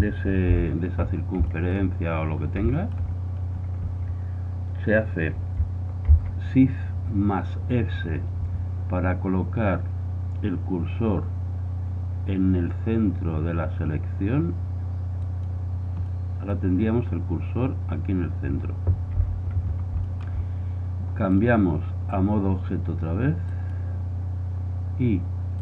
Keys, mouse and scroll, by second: 0.5 KP_1, 1.1-1.4 middle drag, 1.5-3.7 middle drag, 4.7-6.2 middle drag, 6.2 shift+s, 17.7 middle click, 19.2 KP_1, 19.7 middle click.